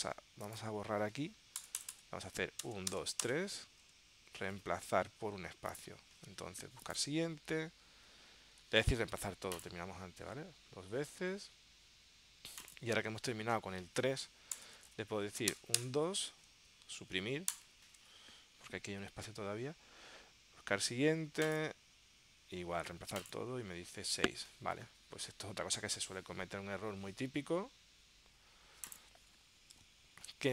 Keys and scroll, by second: 29.9 super+Tab.